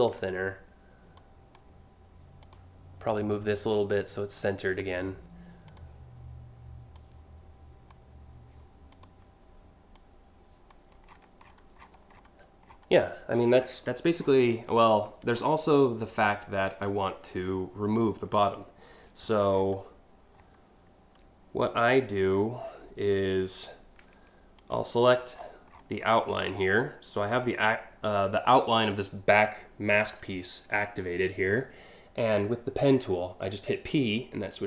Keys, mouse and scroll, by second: 0.8 click, 2.1 click, 2.8-4.0 drag, 4.3 click, 5.3 click, 6.6 click, 8.5 click, 9.6 click, 10.7-11.9 scroll down 8, 12.3 scroll down 1, 12.7-13.3 scroll up 6, 13.8 scroll down 6, 14.1 scroll up 1, 15.0 alt+scroll down 1, 15.7 alt+scroll up 1, 18.9-19.3 alt+scroll up 4, 21.5 click, 24.2 click, 24.8 middle click, 25.0 middle click, 25.3 alt+scroll down 3, 25.6 alt+scroll up 1, 27.1 click.